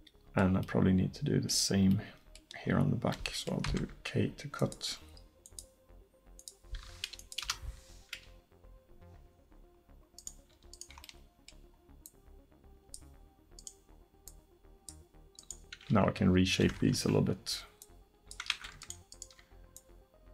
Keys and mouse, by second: 2.4-6.9 middle drag, 3.7 k, 10.2-12.1 right drag, 12.1 middle click, 13.0 click, 13.6-16.2 middle drag, 16.2 click, 16.2 g, 17.8-18.8 drag, 18.6 ctrl+z, 19.7 click.